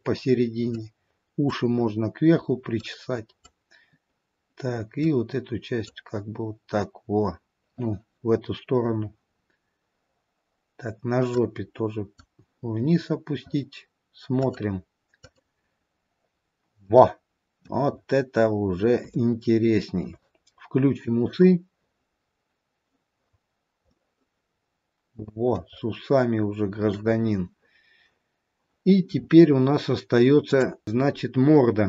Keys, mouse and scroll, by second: 3.0 click, 5.2 click, 7.3-8.2 scroll up 4, 9.4-10.5 scroll down 1, 10.5-11.5 scroll down 1, 11.5 click, 16.6-17.1 scroll down 3, 17.1 middle click, 18.2-18.7 scroll up 2, 19.4 shift+middle click, 21.7 click, 23.6-24.2 scroll down 1, 24.2 middle click, 26.0-26.7 scroll up 1, 26.7-27.0 scroll up 1, 30.5 click.